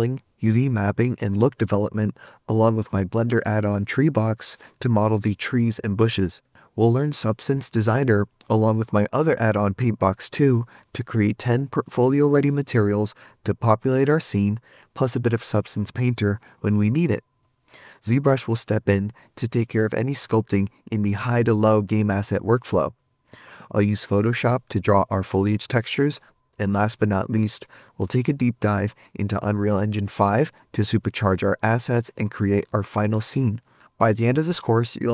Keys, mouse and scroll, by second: 1.4 3, 1.5 Return, 2.0 middle click, 2.3 scroll up 4, 3.2-4.0 middle click, 3.3 middle click, 3.4 scroll down 1, 3.6 middle click, 4.0 scroll up 1, 4.3-5.8 scroll down 52, 20.2 shift+click, 21.2 right click, 22.8 shift+click, 26.5 right click, 26.8 right click.